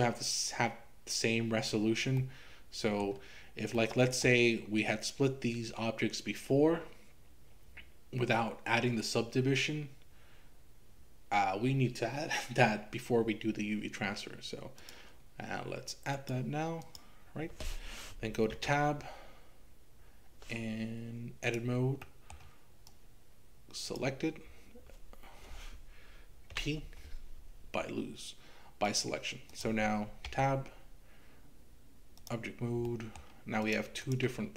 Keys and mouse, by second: 2.2 middle click, 3.8 middle click, 14.8-16.3 drag, 16.9 click, 18.6 Tab, 22.0 middle click, 22.9-24.0 drag, 26.6 p, 29.5 click, 30.3 Tab, 33.0 middle click, 33.6 click.